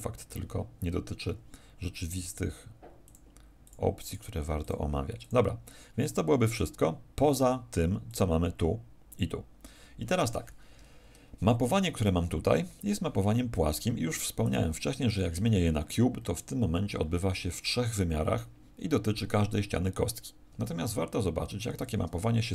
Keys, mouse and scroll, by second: 21.3 F12, 21.3 Escape, 22.3 scroll down 3.